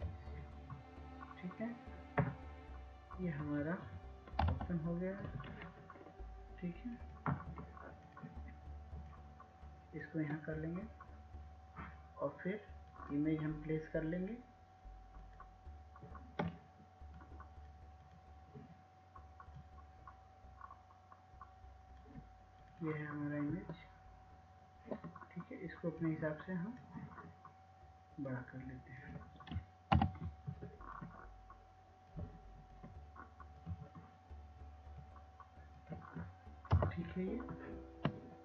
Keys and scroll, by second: 0.0-0.6 typing, 5.0-5.7 typing, 30.9 ctrl+-, 37.9 ctrl+Return.